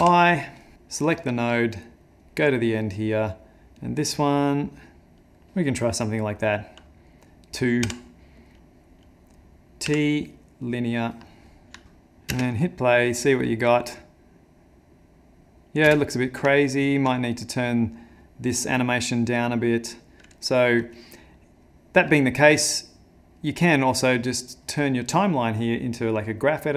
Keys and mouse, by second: 0.7 click, 2.3 click, 3.8 click, 9.8 typing, 11.8 shift+middle click, 12.3 space, 15.9 space, 16.2 middle click, 16.5 ctrl+middle click, 17.4 click, 23.4 click.